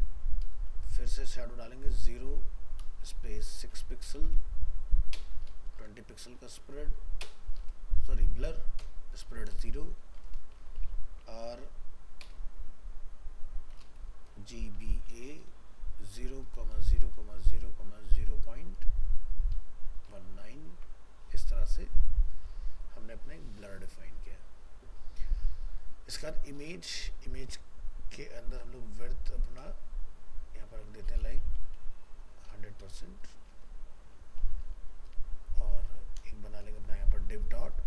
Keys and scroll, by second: 20.7 ctrl+s.